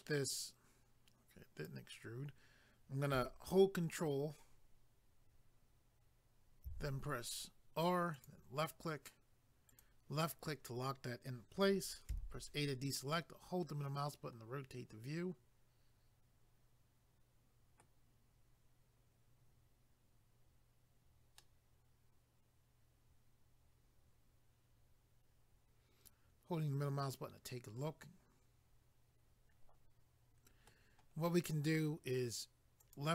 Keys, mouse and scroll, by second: 6.7 ctrl+r, 8.2 click, 9.7 click, 12.1 a, 13.1 middle click, 21.4 middle click, 32.8 click.